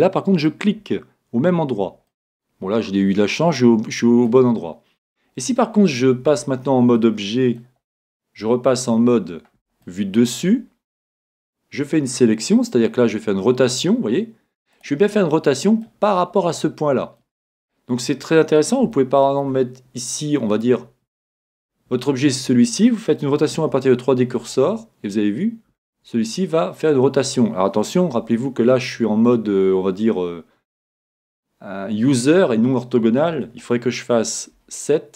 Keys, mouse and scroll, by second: 0.4-2.3 drag, 2.1-3.8 middle drag, 4.3-4.7 scroll up 1, 4.7-5.1 scroll down 1, 5.1-6.7 middle drag, 6.2 Tab, 6.9-8.9 middle drag, 8.4 KP_7, 9.2-11.6 middle drag, 11.2 r, 15.2-20.9 middle drag, 20.9 scroll up 1, 21.1-22.9 drag, 24.4 r, 34.5 KP_7.